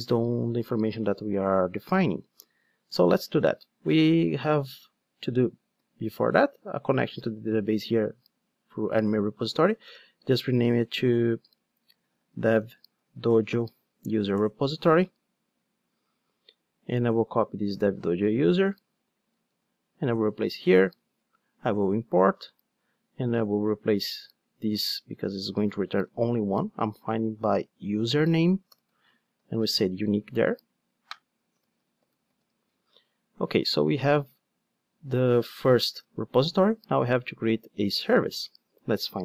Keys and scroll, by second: 5.8 super+c, 6.9 super+v, 9.8 alt+BackSpace, 19.5 super+c, 20.4 super+v, 21.2 alt+Return, 25.5 super+v, 29.8 Return, 35.9 ctrl+alt+o.